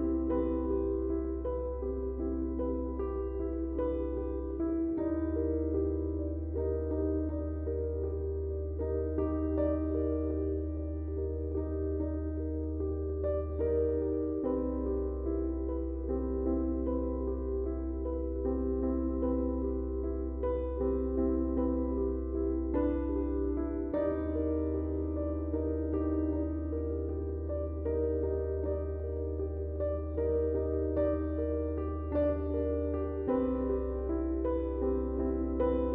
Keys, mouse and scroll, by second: 0.4 click, 0.4 click, 3.0-5.1 drag, 7.7-19.0 drag, 19.9 space, 20.1 click, 20.4 space, 21.1-25.6 ctrl+drag, 25.9 space, 26.0 click, 26.1 click, 26.4 space, 28.6-31.6 drag, 31.6-35.4 shift+drag.